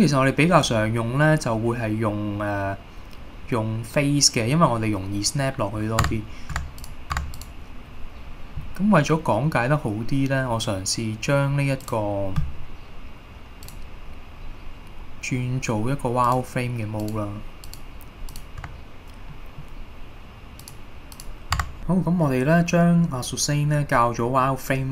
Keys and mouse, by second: 6.2 Tab, 6.7 Tab, 7.3 Tab, 13.8 click, 16.4-17.2 drag, 17.8 click, 18.4 click, 19.4-19.7 middle drag, 20.7 click, 21.7 Tab, 22.0-23.6 middle drag, 24.5 middle click.